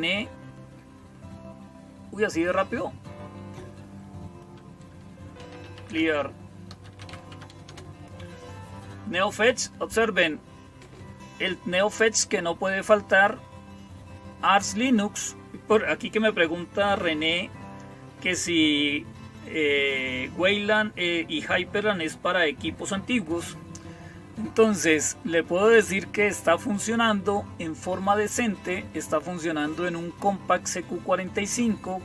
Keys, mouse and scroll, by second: 5.0-7.4 typing, 7.5 Return.